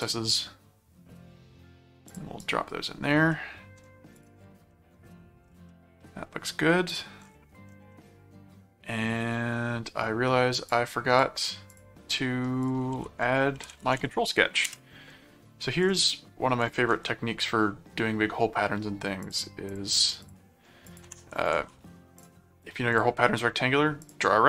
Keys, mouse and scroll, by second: 2.1 click, 2.4 right click, 3.3 middle click, 4.1 click, 4.7 middle click, 5.7-6.7 middle drag, 6.9 click, 7.9-9.5 middle drag, 10.7 click, 11.7 click, 12.1 middle click, 12.6 click, 12.9-14.5 typing, 14.6 Return, 15.8 ctrl+click, 16.8 ctrl+1, 19.2-20.7 drag, 20.9 click, 21.7 alt+c, 22.2 click, 22.9 click, 24.0 click.